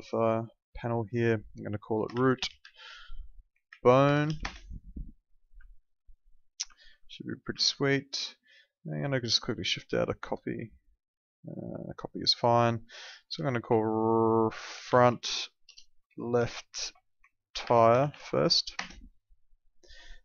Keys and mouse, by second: 1.9-4.8 typing, 5.7 alt+middle click, 6.7 alt+middle click, 7.6 alt+middle click, 9.0 w, 9.8 shift+click, 12.3 click, 14.9-18.6 typing, 18.7 KP_Enter, 20.1 click.